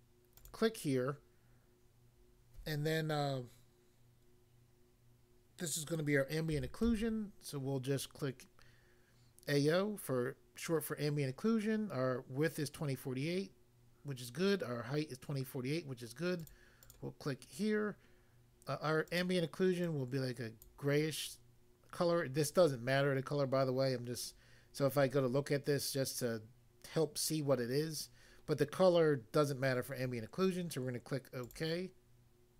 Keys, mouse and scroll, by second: 0.4 click, 0.5 click, 6.5-6.9 typing, 16.4 click, 16.9 click, 19.1 click, 19.2 click, 19.8 click, 20.6 click, 31.5 click.